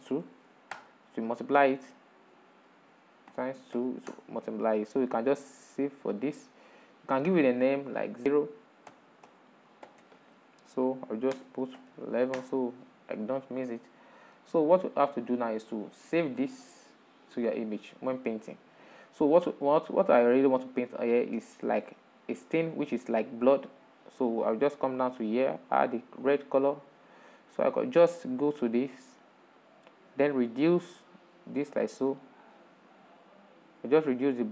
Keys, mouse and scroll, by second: 13.0 1, 20.4-26.1 middle drag, 26.1-34.5 drag.